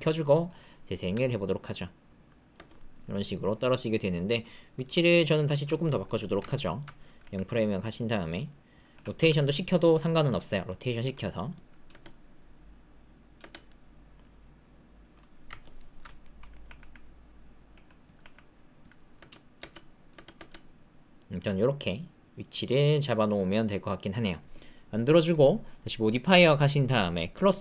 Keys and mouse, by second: 1.1 space, 2.5 space, 2.7-4.3 middle drag, 4.5-5.5 middle drag, 6.5 alt+click, 7.2 g, 8.3 click, 8.9 r, 11.0 s, 11.8 space, 13.4 space, 13.6-15.1 drag, 15.6 alt+click, 16.2 click, 16.6 g, 17.7-20.3 typing, 21.1-24.0 drag, 26.2 click, 27.5 click.